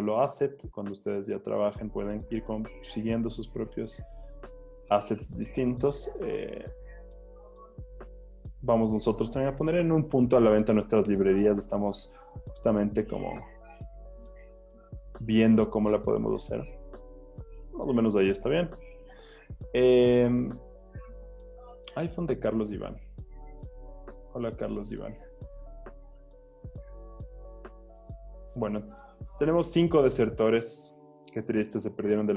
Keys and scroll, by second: 3.2 Return, 3.7 z, 4.8 z, 7.7 v, 10.5 super+t, 14.9 Return, 17.3 z, 18.8 z, 19.3 z.